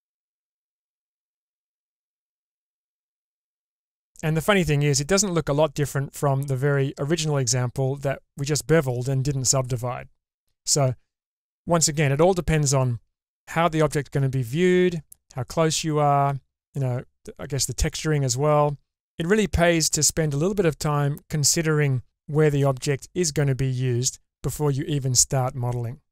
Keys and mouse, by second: 0.8-1.8 middle drag, 2.2-2.8 drag, 2.2-2.8 right drag, 3.5 click, 3.5 right click.